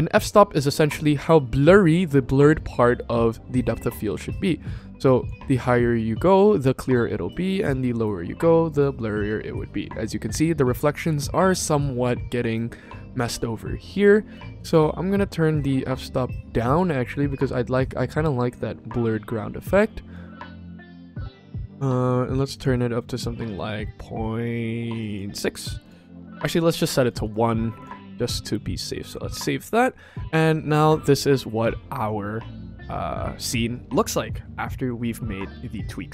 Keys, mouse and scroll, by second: 4.2-5.1 drag, 6.8 click, 14.2-18.4 drag, 20.0-21.3 drag, 21.9 click, 22.2 click, 22.4 click, 24.8 click, 24.9 click, 25.7 click, 26.6 click, 26.7 click, 26.9 click, 27.1 click, 27.7 click, 28.0 ctrl+s.